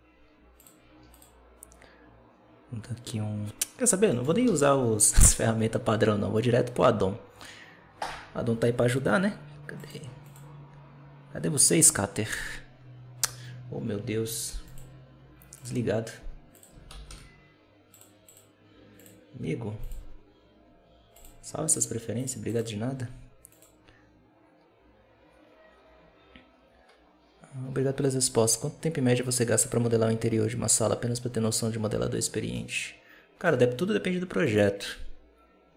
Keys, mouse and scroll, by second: 0.5 click, 2.1 click, 3.3 click, 3.8 scroll down 1, 4.0 middle click, 4.1 scroll up 1, 4.4 alt+a, 9.6 click, 10.1 click, 14.5-17.6 drag.